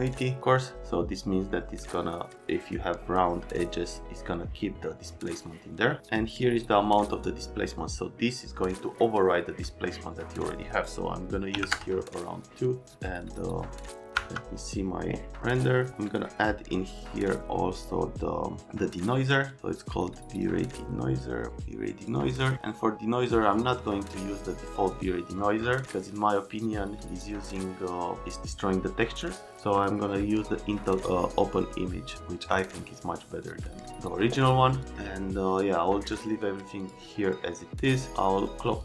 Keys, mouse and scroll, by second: 6.9 click, 7.1 click, 11.5 KP_3, 11.7 KP_Enter, 13.2 click, 14.1 F10, 15.5 click, 16.1 click, 16.9 click, 17.7 click, 20.3 click, 22.1 click, 24.9 click, 29.7 click, 30.8 click, 32.4 click, 33.4 click, 36.8 click, 38.7 click.